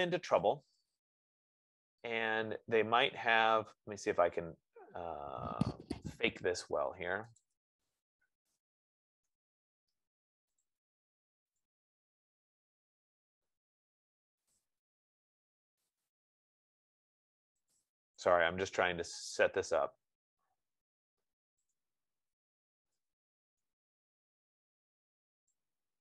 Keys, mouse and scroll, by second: 0.8 click, 4.2-5.1 scroll, 7.0 Escape, 7.7 click, 8.2-10.0 typing, 10.9 click, 11.9 click, 12.7-13.4 typing, 14.8 click, 16.3 click, 18.7 Return, 22.1 shift+click.